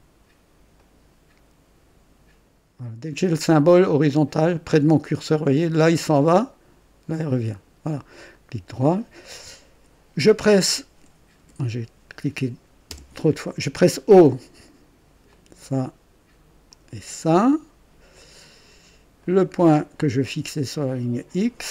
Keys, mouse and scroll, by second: 0.7 click, 7.5 click, 8.3 right click, 9.6 Escape, 11.3 Escape, 12.8-13.2 typing, 15.2 click, 16.6 click, 19.1 click, 20.8 click.